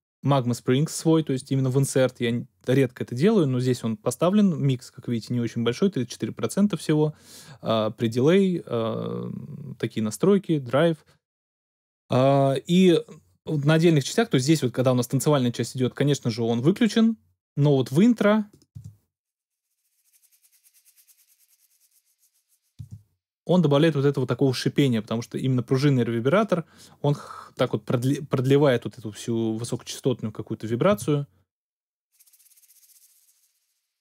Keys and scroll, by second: 18.7 space, 22.8 space, 30.9 space.